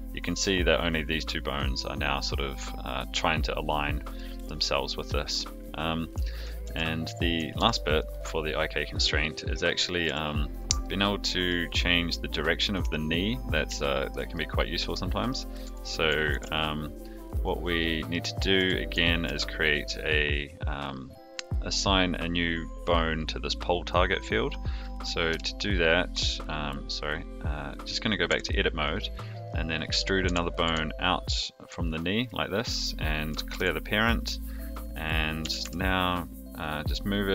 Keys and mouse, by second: 4.1 middle drag, 5.0 middle drag, 6.6 a, 7.5 alt+g, 10.0 g, 10.8-11.5 middle drag, 13.7-14.1 shift+middle drag, 14.3-15.3 middle drag, 15.6 a, 16.3 alt+r, 17.5 click, 17.8-18.1 middle drag, 18.5 a, 19.2 alt+g, 25.3 KP_3, 28.2 Tab, 29.5 click, 30.2 e, 33.5 alt+p, 35.4 g.